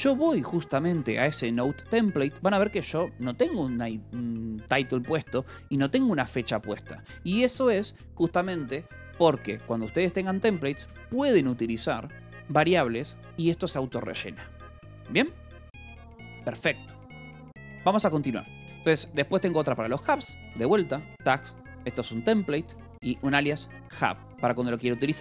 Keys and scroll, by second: 0.4-2.3 typing, 3.6 j, 5.0 Escape, 5.2 j, 6.2 shift+v, 7.0 Escape, 8.9 k, 9.3 l, 10.8 v, 11.4 e, 13.0 Escape, 17.9-19.1 typing, 20.4 j, 21.6 shift+v, 22.3 Escape, 22.7 k, 23.5 shift+v, 23.9 Escape, 24.6 j.